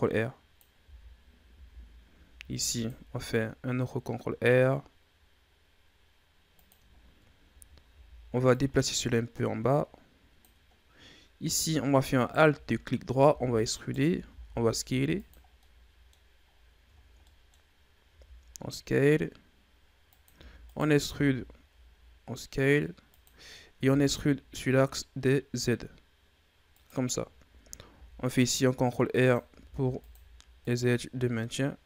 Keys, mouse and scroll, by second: 0.7 z, 1.5 z, 2.3 ctrl+r, 6.9-7.4 scroll down 2, 7.4 a, 7.8 a, 8.4-10.8 drag, 10.8-12.1 scroll up 2, 12.1 alt+right click, 13.2 e, 14.2 s, 15.3 scroll down 2, 15.5 middle click, 16.4-16.9 scroll up 4, 16.9 scroll down 1, 17.1 middle click, 17.5 scroll up 1, 17.9 s, 20.3 e, 21.0 s, 23.8 e, 27.8 ctrl+r, 29.5 ctrl+r, 31.1-31.8 scroll down 2.